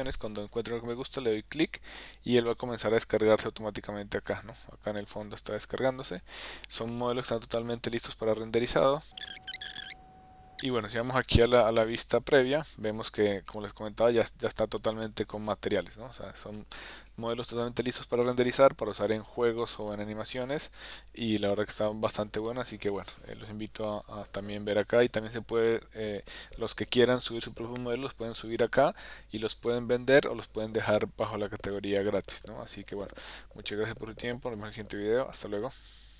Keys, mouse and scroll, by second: 1.2 click, 4.3-5.4 middle drag, 8.5 click, 9.4 middle click, 9.4 g, 9.6 shift+middle click, 10.5 click, 11.1-12.3 middle drag, 13.5 shift+middle click, 15.8 shift+middle click, 17.1-22.0 middle drag.